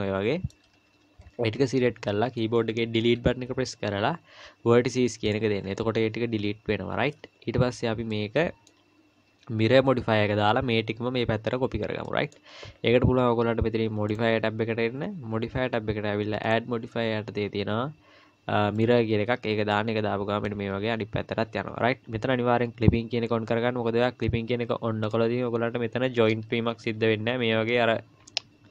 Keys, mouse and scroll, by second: 0.9 KP_1, 1.3-2.3 scroll up 4, 3.0 Delete, 5.6-8.1 scroll down 3, 8.1 middle click, 12.1 middle click, 14.1 click, 16.4 click, 19.7 middle click, 25.0 click, 25.5-26.3 scroll up 1, 27.0 g.